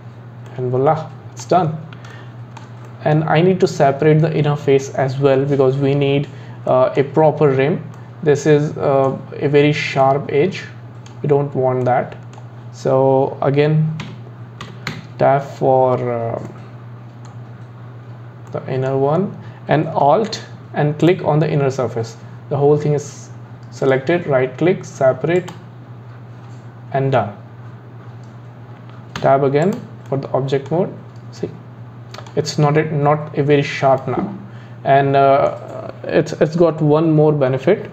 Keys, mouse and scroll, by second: 0.5-6.0 middle drag, 6.7-7.2 middle drag, 7.2-8.0 scroll up 8, 8.0-11.4 middle drag, 11.4-11.8 scroll down 2, 11.8-14.0 middle drag, 14.9 Tab, 16.5-21.1 middle drag, 21.1 alt+click, 23.8-27.0 right drag, 29.2 Tab, 29.6 click, 30.1-31.0 middle drag, 31.0 scroll down 2, 31.4-37.2 middle drag.